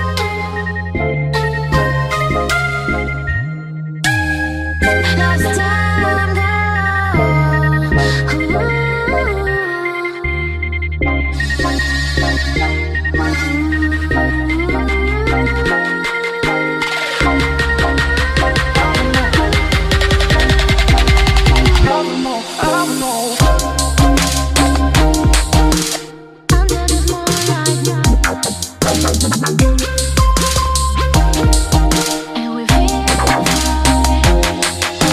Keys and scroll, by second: 0.3 ctrl+c, 3.4 ctrl+v.